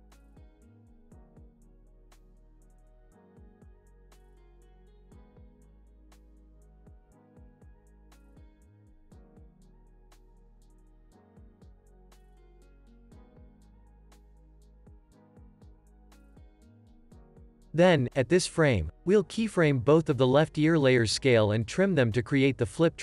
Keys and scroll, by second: 7.1 Escape, 8.2 Right, 11.7 super+s.